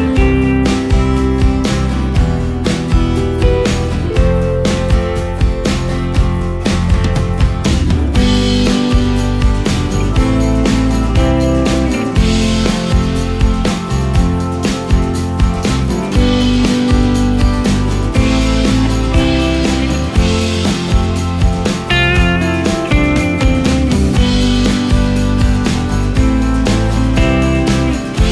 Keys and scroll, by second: 3.5 ctrl+space, 6.4 ctrl+space, 21.1 ctrl+space, 27.4 ctrl+space.